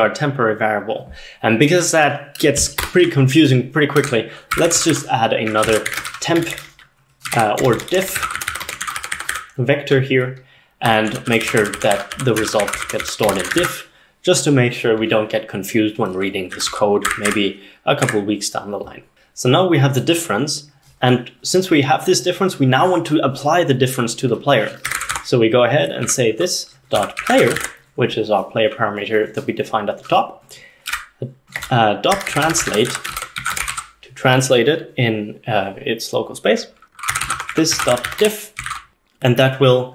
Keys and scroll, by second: 2.8 Escape, 3.1-13.9 typing, 16.3-17.1 typing, 17.1 Tab, 17.3 Tab, 18.1 Tab, 24.7-28.1 typing, 30.7-34.3 typing, 36.9-39.4 typing.